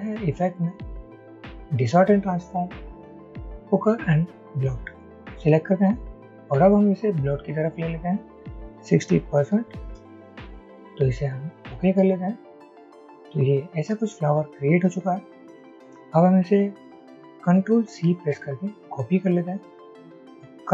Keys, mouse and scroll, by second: 9.6-9.9 typing, 18.9-19.6 typing.